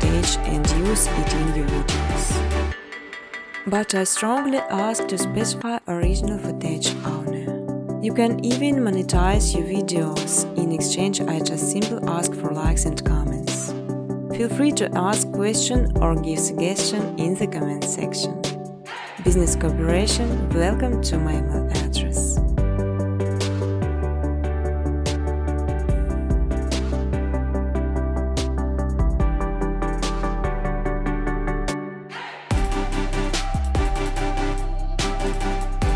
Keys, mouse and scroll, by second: 0.0-0.9 typing, 1.3 Tab, 2.8-6.0 typing, 4.3 Tab, 7.3 click, 8.6 click, 9.4 ctrl+c, 9.6 ctrl+d, 10.4 click, 12.2 click, 12.6-13.5 typing, 13.4 click, 14.2 click, 15.4 click, 16.0 click, 18.8 click, 19.1 click, 19.8-21.6 typing, 23.3 click, 23.8-26.4 typing, 26.3 Return, 28.0-28.8 typing, 28.1 click, 28.7 click, 30.8 click, 31.7 click, 32.3 click, 33.6-34.3 scroll, 34.3-35.6 scroll, 35.7 click.